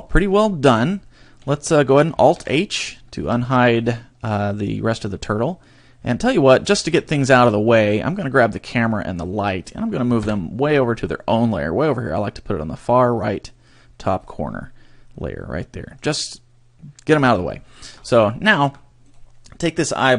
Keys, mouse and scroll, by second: 0.2-0.8 scroll up 10, 1.0 shift+middle click, 2.3 alt+h, 2.7-3.1 scroll down 3, 3.2 a, 3.5 shift+middle click, 6.6 scroll down 3, 7.1 shift+middle click, 8.1 right click, 9.2 shift+right click, 10.2 m, 15.5 middle click, 17.1-17.6 scroll down 1, 18.0 scroll up 5, 18.5 shift+middle click, 19.1 right click.